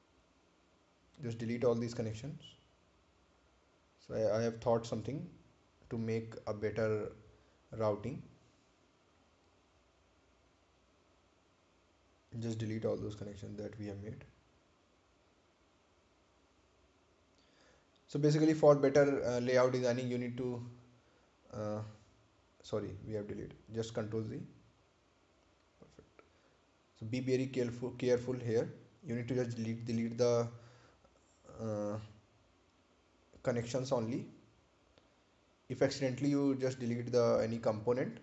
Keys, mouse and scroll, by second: 0.9 Delete, 2.5 click, 4.6 Delete, 5.7 click, 7.1 Delete, 8.0 click, 9.4 Delete, 10.3 click, 12.3 Delete, 13.8 click, 14.1 Delete, 15.3 click, 15.7 Delete, 16.7 click, 17.3 Delete, 18.9 click, 19.4 Delete, 20.2 click, 20.4 Delete, 21.4 click, 21.8 Delete, 23.5 ctrl+z, 24.1 click, 26.0 Delete, 26.9 click, 29.1 Delete, 29.7 click, 31.2 Delete, 32.1 click, 35.4 Delete.